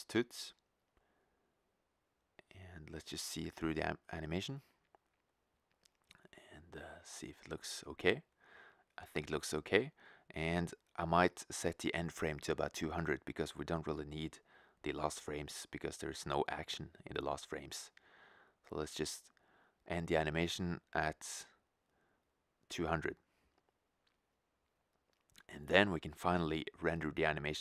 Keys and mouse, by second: 0.0 Return, 2.6-4.4 drag, 13.9-15.9 drag, 18.3-20.0 drag, 22.9-24.5 drag, 24.2 0, 27.3 middle click.